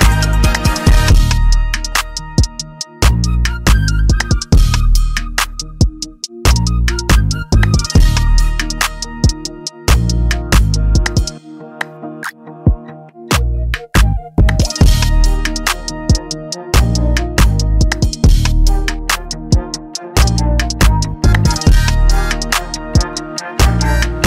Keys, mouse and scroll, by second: 1.1 click, 5.8 click, 5.8 [, 6.6 ctrl+z, 8.1 click, 8.1 z, 8.9-9.3 scroll, 9.9 click, 9.9 scroll, 12.9 scroll, 13.7 p, 17.1 click, 17.1 b, 19.5 click, 23.9 click.